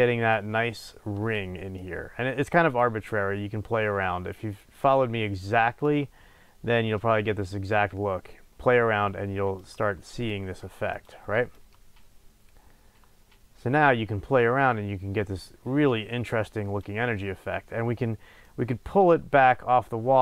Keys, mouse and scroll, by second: 2.7-11.0 drag, 11.5-20.2 drag.